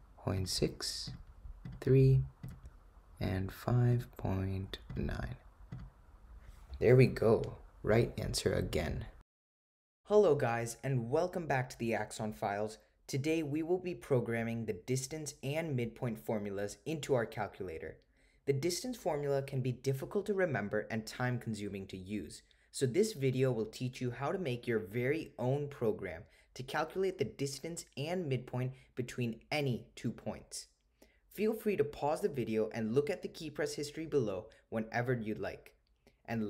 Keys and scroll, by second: 0.4 6, 1.2 Return, 1.7 3, 2.5 Return, 3.6 5, 4.0 ., 5.3 9, 5.8 Return.